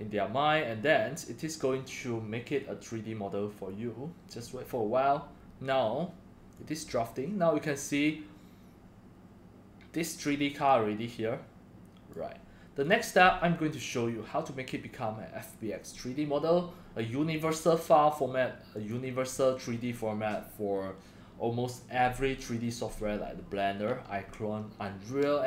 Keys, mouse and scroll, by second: 6.5-7.0 drag, 11.7-12.1 drag, 12.8 click, 13.0 click, 17.3 click, 18.7 click.